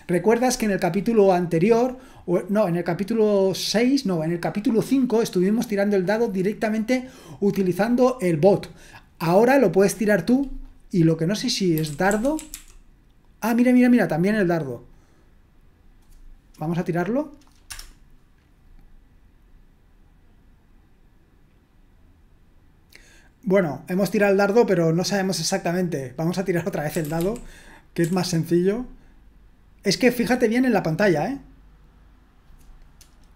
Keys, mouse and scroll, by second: 11.3 click, 11.5-13.0 typing, 11.9 click, 14.9 click, 17.7 Return, 26.5 click, 26.7-28.0 typing, 30.8 click.